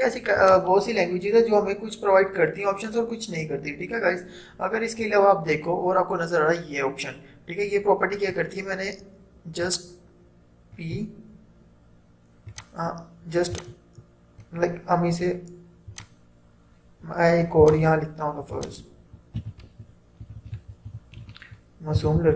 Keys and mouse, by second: 9.8-16.0 drag, 19.5-22.3 typing.